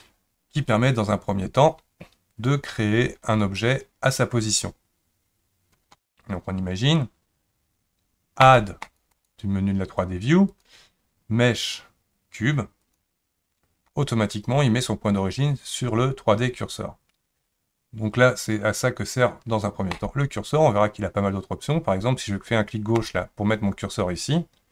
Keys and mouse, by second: 8.4 click, 9.1-10.0 drag, 10.6-13.0 drag, 19.9 click, 23.0 click.